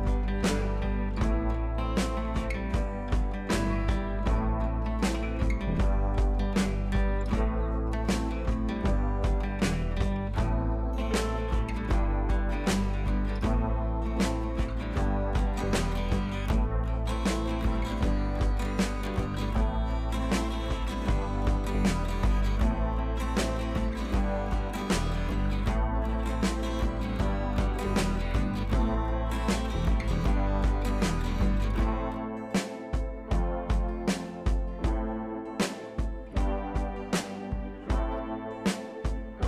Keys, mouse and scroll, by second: 3.9 right click, 5.1 Right, 5.7-7.2 drag, 8.1-8.9 scroll down 1, 8.9 click, 10.9 shift+F4, 11.3-11.8 scroll down 1, 12.4-13.3 click, 13.5 scroll up 1, 14.7-15.7 shift+drag, 18.7 click, 21.6 click, 23.7-25.5 drag, 27.1-30.8 drag, 33.0 shift+Page_Down, 33.5 ctrl+Page_Up, 35.8-36.6 shift+drag, 37.3 Down.